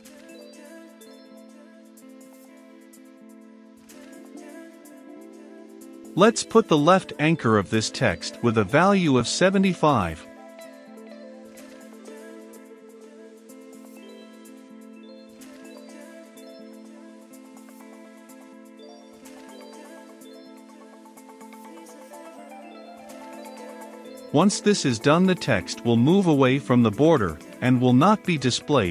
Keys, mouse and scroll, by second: 0.0-0.3 typing, 1.4-3.2 typing, 3.9-11.8 drag, 11.8 Return, 12.9 click, 13.3 Return, 13.6-15.8 typing, 13.9 Return, 15.3 Return, 16.1 Return, 17.0-19.4 drag, 19.4-24.0 typing, 19.9 Return, 20.5 Return, 21.6 Return, 22.2 Return, 23.7 Return, 24.5 Down, 24.6 Return, 25.7-28.9 drag.